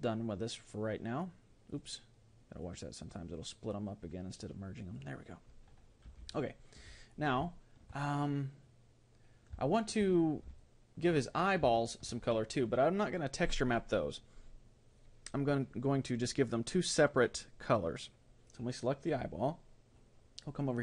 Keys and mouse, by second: 0.8 click, 3.1-5.7 drag, 6.3-9.4 middle drag, 9.7-13.6 middle drag, 18.5-20.1 right drag.